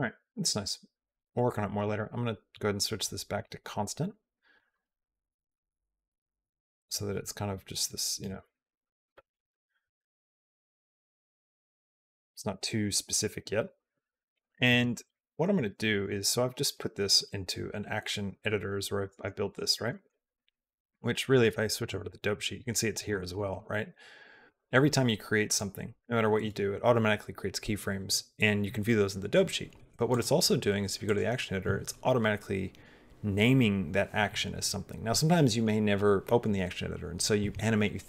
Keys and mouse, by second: 0.5 click, 1.7-3.3 right drag, 3.6 click, 4.4 click, 5.7 space, 9.2 alt+space, 9.7 alt+p, 10.7 click, 11.4 click, 12.2-12.9 drag, 19.5 middle click, 19.8 middle click, 20.3 middle click, 21.3 click, 24.4 click, 25.3 click, 25.9 click, 30.1 click.